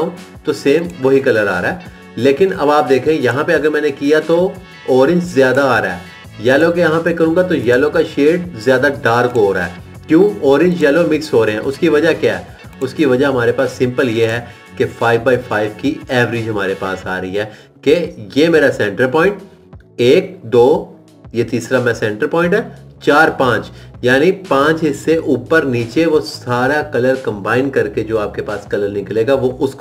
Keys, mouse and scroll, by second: 0.3 click, 3.6 click, 7.7 click.